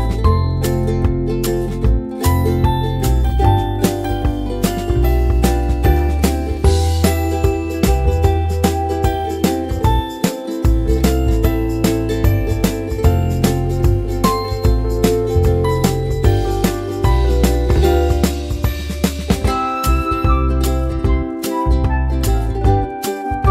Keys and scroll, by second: 8.9-11.9 typing, 10.5 Escape, 12.0 Return, 18.8-19.9 typing.